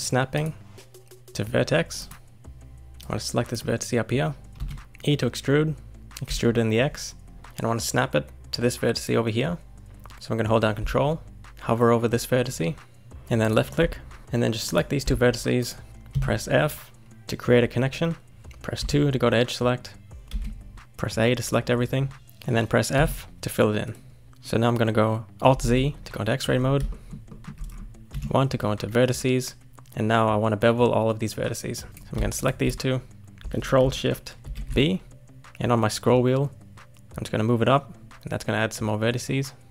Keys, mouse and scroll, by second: 0.3-2.9 drag, 3.0 click, 4.6 e, 14.6 click, 15.6 shift+click, 16.1 f, 18.8 2, 20.3 a, 22.9 f, 24.3-25.6 shift+middle drag, 25.6 alt+z, 26.5-26.9 scroll up 4, 26.9 shift+middle click, 27.7-28.1 scroll up 1, 28.1 1, 31.8 scroll up 1, 31.9 click, 32.3 shift+click, 34.4 ctrl+shift+b.